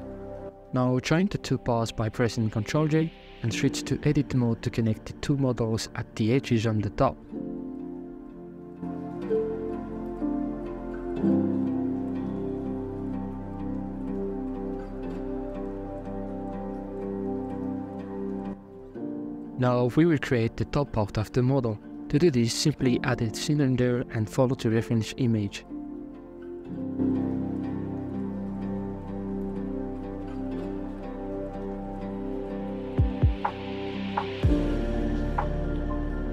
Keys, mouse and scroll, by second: 0.1 click, 0.5 middle click, 1.2 shift+right click, 2.2 ctrl+j, 3.0-3.5 shift+scroll up 3, 3.1 shift+middle drag, 3.8 Tab, 4.2 middle click, 4.5 scroll up 4, 4.9 KP_Divide, 5.7 alt+right click, 6.6 KP_5, 7.0 KP_Decimal, 7.7-9.0 middle drag, 9.0 g, 10.3 alt+shift+right click, 10.8 g, 13.2 right click, 13.7 shift+right click, 14.1 f, 14.8 right click, 15.3-16.9 f, 17.2-17.7 scroll down 8, 17.8 shift+middle click, 18.2 scroll down 3, 18.4 middle click, 18.6 scroll up 4, 19.7 scroll down 5, 19.9 shift+middle click, 20.4 shift+a, 21.2-21.5 scroll down 1, 21.5 Tab, 21.9 scroll down 3, 22.4 s, 24.3 g, 25.5 KP_Decimal, 25.8 shift+middle click, 25.9 g, 28.7 s, 30.8 g, 31.6 middle click, 32.4 KP_1, 33.2 g, 34.9 middle click, 35.1 i, 36.1 middle click.